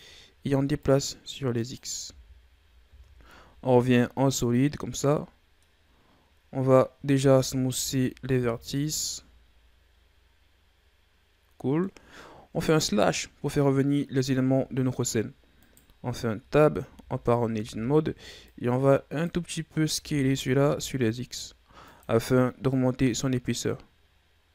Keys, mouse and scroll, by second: 0.7-2.0 drag, 2.0 z, 2.8 Tab, 3.4-3.8 scroll down 2, 3.8-5.8 middle drag, 5.8-7.1 scroll up 4, 7.1 w, 8.3 a, 8.6 scroll down 2, 8.9-12.1 middle drag, 12.6 KP_Divide, 15.5 right click, 16.2 Tab, 16.9 a, 17.5 a, 18.4-19.8 drag, 19.8 s, 22.6-24.5 drag.